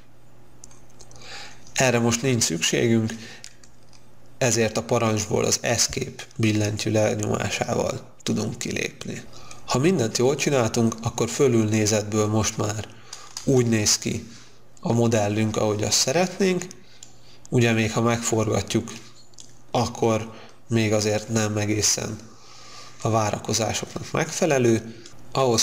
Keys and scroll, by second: 4.9 Escape, 13.6 space.